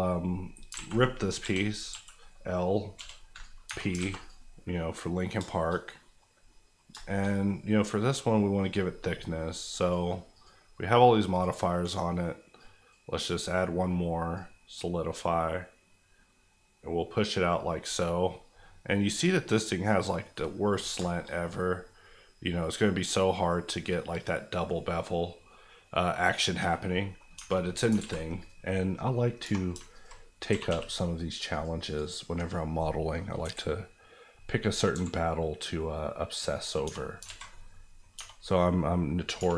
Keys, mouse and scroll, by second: 0.7 alt+right click, 0.7 alt+a, 1.4 l, 1.9 l, 2.9 p, 3.3 click, 3.6 Tab, 4.0 alt+a, 4.2 click, 4.6 middle click, 5.3 shift+middle click, 5.7 scroll down 1, 6.0 middle click, 6.9 shift+middle click, 7.2 middle click, 7.3 scroll up 1, 9.8-18.1 drag, 20.3 middle click, 20.9 shift+middle click, 21.2 middle click, 21.3 scroll up 1, 24.7-26.3 middle drag, 26.6 scroll down 1, 26.8 middle click, 27.3 Tab, 28.0 alt+z, 28.4 click, 29.4 2, 29.9 alt+click, 30.5 g, 30.6 g, 31.5 click, 33.4 KP_1, 34.9 e, 36.5 click, 36.8 Tab, 37.2 alt+z, 37.5 alt+middle click, 38.1 Tab, 39.4 1.